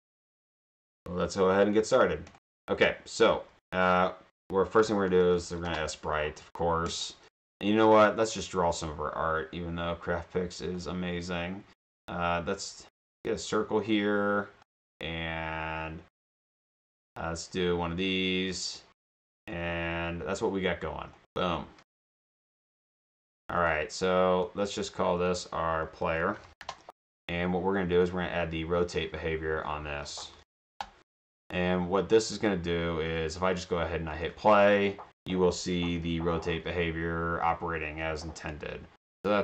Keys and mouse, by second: 2.3 click, 2.5 click, 4.7-6.1 typing, 6.9 click, 10.8-14.4 drag, 17.0-19.4 drag, 21.2 click, 23.0 shift+click, 24.0 click, 25.3 click, 25.8-27.1 typing, 27.9 drag, 29.0 click, 29.8-31.2 typing, 32.1 click, 34.1 click.